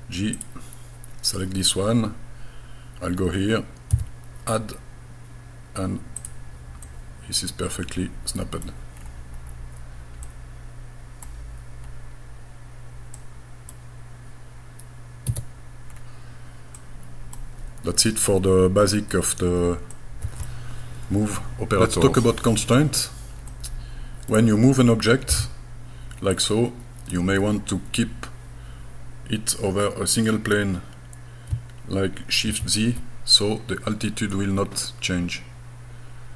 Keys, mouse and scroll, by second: 0.4 click, 3.9 a, 6.2 click, 6.9-8.7 middle drag, 9.0 scroll down 3, 9.4-9.9 scroll up 2, 10.3-11.3 middle drag, 11.9 scroll down 1, 13.2 middle click, 15.3 Tab, 15.9 scroll down 2, 16.8 middle click, 17.8-18.3 scroll up 3, 18.8 scroll down 1, 20.0 middle click, 22.7-23.5 scroll up 2, 23.5 middle click, 25.3 g, 26.4-28.3 drag, 32.5 shift+z.